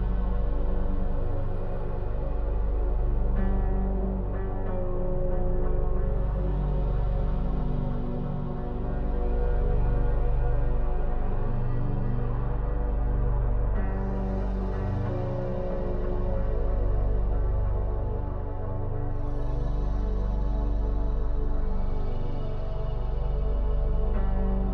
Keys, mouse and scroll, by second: 0.4 click, 0.9 shift+e, 3.1 click, 3.5 shift+e, 4.8-7.0 middle drag, 7.0 click, 7.4 shift+e, 8.8 shift+middle click, 9.6 KP_Decimal, 10.6 click, 11.1 KP_Decimal, 12.2 Home, 13.3-14.3 scroll down 3, 14.3-15.8 middle drag, 15.8 Tab, 16.6-19.6 middle drag, 23.3-24.7 shift+middle drag.